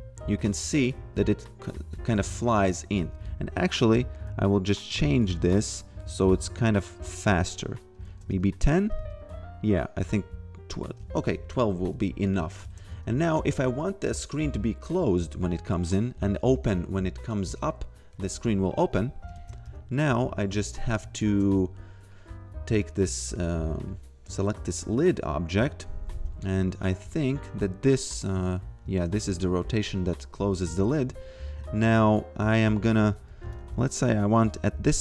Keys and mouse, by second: 0.4 shift+a, 0.8 f, 2.1 shift+a, 2.5 f, 3.8 click, 8.1 shift+a, 8.3 f, 9.9 click, 10.9-12.9 typing, 12.2 click, 19.6 f, 20.9 click, 21.2 shift+a, 22.1 click, 26.2 a, 27.8 click, 29.2 ctrl+z, 30.6 shift+a, 32.4 f, 33.3 a, 34.5-35.0 typing.